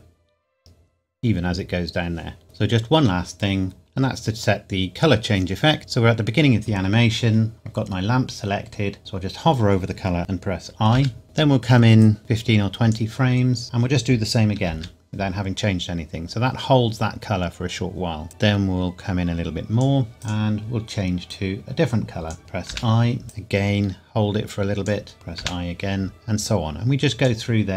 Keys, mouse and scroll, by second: 2.4 click, 10.2 click, 12.0 click, 14.7 i, 18.3 click, 23.3 click, 26.1 click.